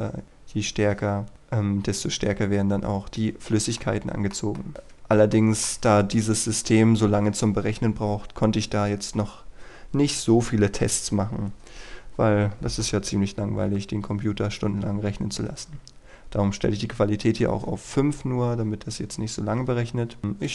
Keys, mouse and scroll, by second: 5.3 shift+middle click, 20.4 click.